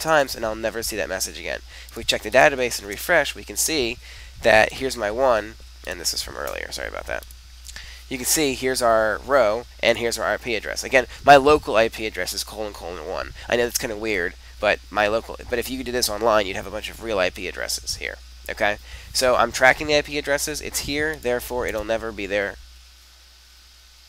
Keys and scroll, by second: 2.8 super+r, 21.7 super+r.